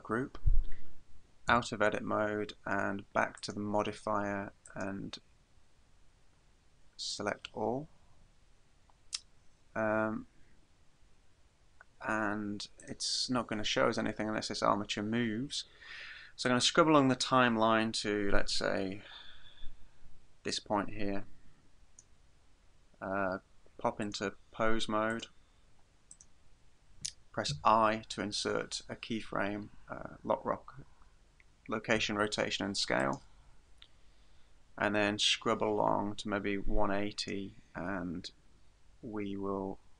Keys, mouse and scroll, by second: 1.5 Tab, 3.4 click, 4.7 click, 11.3-12.8 scroll down 1, 12.8 right click, 12.8 scroll down 1, 13.9-14.4 scroll up 3, 14.6 scroll down 3, 16.5 click, 24.0 click, 26.2 right click, 27.5 i, 35.3 click.